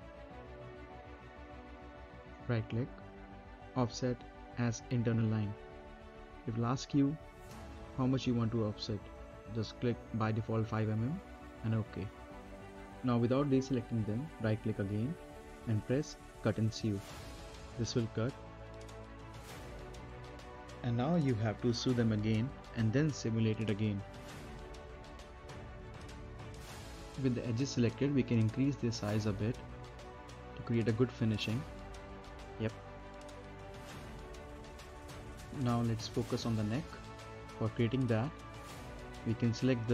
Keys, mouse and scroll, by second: 0.4 middle click, 0.6-1.1 scroll down 1, 1.1 middle click, 2.0 right click, 9.4-10.6 scroll up 1, 10.6 middle click, 10.9-11.3 scroll down 1, 11.3 middle click, 11.8 scroll down 1, 12.7 middle click, 13.2 scroll down 1, 13.5 middle click, 14.6 right click, 18.2-20.0 scroll up 1, 21.3 middle click, 21.8 scroll down 1, 22.3 middle click, 22.8 space, 24.3 right click, 24.5-25.1 scroll down 2, 24.7 middle click, 25.1 right click, 26.0 click, 26.3 scroll down 1, 26.5 middle click, 26.7 scroll up 1, 26.9 middle click, 28.1 Down, 28.9-30.3 scroll up 1, 30.3 click, 31.0-31.8 scroll up 1, 31.8 right click, 32.4 space, 33.3 click, 33.6 scroll up 1, 33.9 right click, 34.2 space, 34.4 scroll down 1, 34.7 middle click, 35.4 scroll down 1, 35.6 middle click, 35.8-37.6 right drag, 37.6 click, 38.6 middle click, 38.8-39.2 scroll down 1, 39.2 middle click.